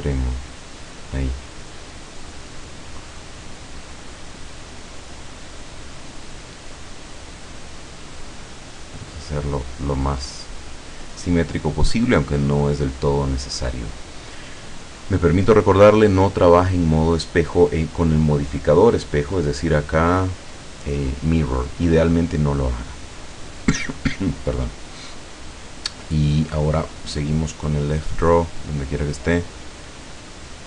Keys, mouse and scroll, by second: 1.8-3.2 middle drag, 3.3-3.8 scroll down 1, 3.8-5.2 middle drag, 5.3-5.8 scroll up 1, 6.3 scroll down 1, 7.2-9.2 drag, 9.8-10.3 scroll down 2, 10.3 click, 11.3 scroll up 1, 11.8 scroll down 1, 13.1-13.5 scroll down 1, 13.7-14.5 scroll down 2, 18.5 click, 22.7-23.0 scroll up 1, 23.1-23.4 scroll down 2, 24.0 scroll up 2, 24.8 scroll up 2, 25.2 click.